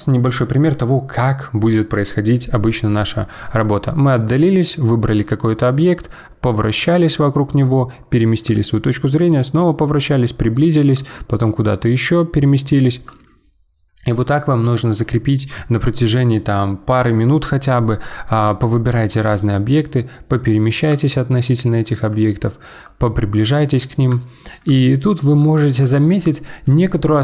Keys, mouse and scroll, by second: 3.7-4.3 scroll down 5, 4.3-5.0 scroll up 3, 5.0 click, 5.4-9.9 middle drag, 9.9-10.5 scroll up 7, 10.5-15.5 shift+middle drag, 18.2 click, 18.6-21.9 middle drag, 21.9 click, 22.2 shift+middle click, 22.9-23.2 scroll up 5, 23.6-23.9 scroll down 6, 24.2-27.2 shift+middle drag.